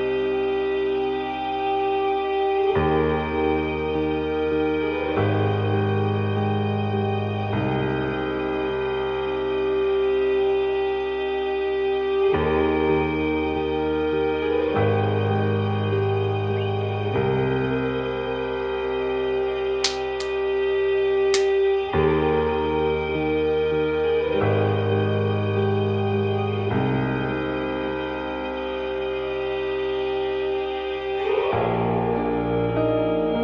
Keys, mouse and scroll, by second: 7.1-11.1 drag, 12.4 shift+z, 25.0-33.4 drag.